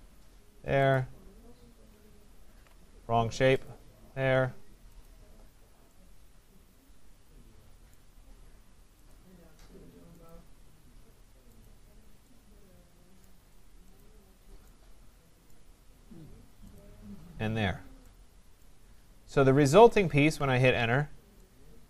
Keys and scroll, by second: 2.4 ctrl+z, 20.3 Return.